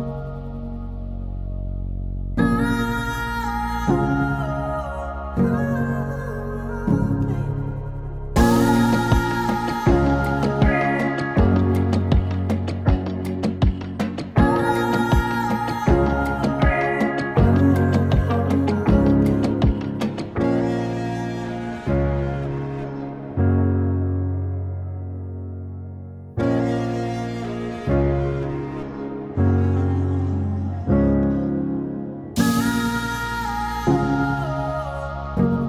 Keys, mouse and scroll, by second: 6.7 alt+], 8.1-11.2 drag, 22.9-35.6 drag.